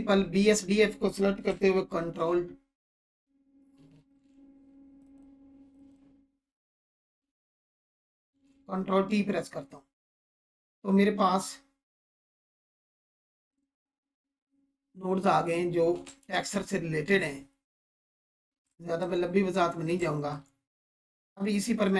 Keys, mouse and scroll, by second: 2.2 ctrl+t, 3.0 click, 3.9 ctrl+z, 5.0 click, 8.1 ctrl+t, 9.4-11.2 scroll down 1, 13.1 scroll up 1, 16.2 ctrl+space, 17.2-18.0 scroll up 1, 19.0-19.3 alt+shift+click, 19.2 scroll up 1, 19.9-20.6 shift+drag.